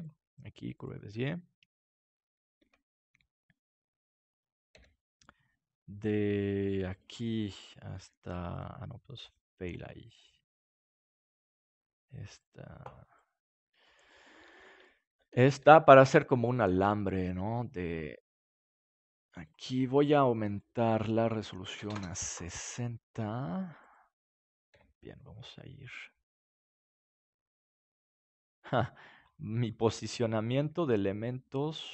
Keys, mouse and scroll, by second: 2.5 Tab, 3.7-5.7 drag, 4.7 g, 7.0-9.4 drag, 7.5-10.5 right drag, 8.1 g, 9.7 g, 11.7-13.5 drag, 12.2-15.0 right drag, 13.5 g, 14.6-16.3 drag, 15.5 g, 16.3 middle click, 16.6-18.4 drag, 17.0-18.8 right drag, 17.8 g, 20.5 click, 22.7 middle click, 23.8 right click, 24.7 g, 28.5-30.6 drag, 30.6 g.